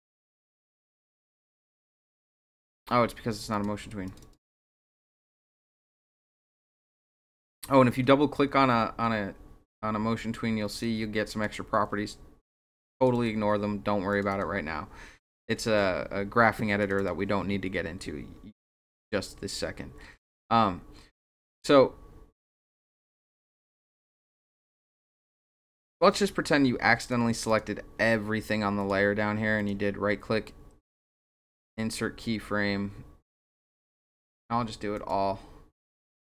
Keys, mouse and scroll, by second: 3.5 click, 4.1 click, 4.2 click, 4.6 right click, 5.7 click, 5.9 click, 6.9 click, 7.0 click, 8.2 scroll down 2, 9.0 scroll down 2, 9.8 scroll down 2, 10.8-11.4 drag, 13.0 click, 13.1 click, 14.1 click, 14.3 click, 16.8 click, 17.0 click, 21.4 click, 22.5 click, 22.7 click, 23.6 click, 23.8 click, 24.9 click, 27.0 click, 27.5 click, 28.8 click, 29.6 right click, 34.9 click.